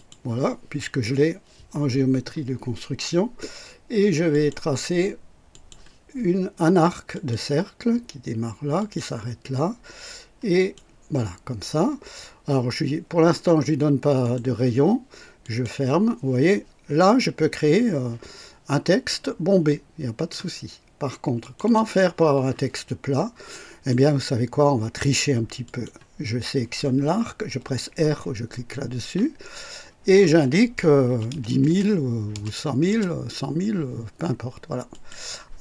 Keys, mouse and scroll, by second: 0.0 click, 4.3 click, 5.5 click, 7.1 click, 8.8 click, 10.5 click, 14.2 right click, 15.4 click, 19.1-20.5 drag, 21.4 click, 22.9 scroll up 2, 23.5-24.1 right drag, 25.6 click, 29.0 r, 31.0 KP_1, 31.5 KP_0, 32.3 KP_0, 32.9 KP_0, 34.9 click.